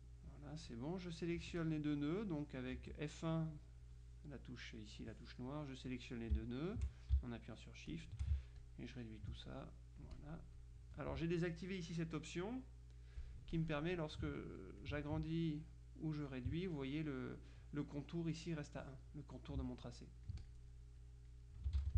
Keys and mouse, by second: 0.8 click, 1.5 F1, 1.7 click, 2.8 F1, 6.0 click, 8.0 click, 8.6-9.8 ctrl+drag, 10.2 click, 13.6-15.4 drag, 15.5-16.8 drag, 19.8-21.9 ctrl+drag, 21.9 ctrl+z.